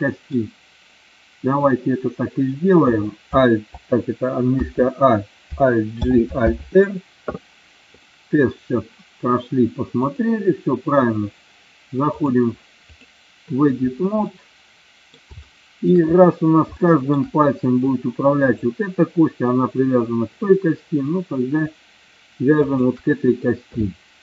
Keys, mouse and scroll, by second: 4.6 a, 6.0 alt+g, 6.6 alt+r, 8.2-8.7 middle drag, 10.0 click, 12.2 click, 14.3 middle click, 15.5 shift+middle click, 16.9 shift+middle click, 18.5 click, 22.7 shift+click.